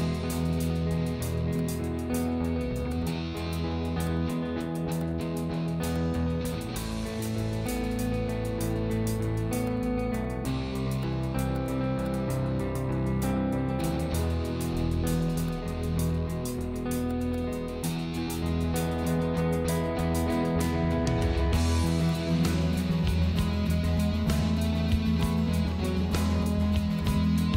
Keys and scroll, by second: 12.8 Delete.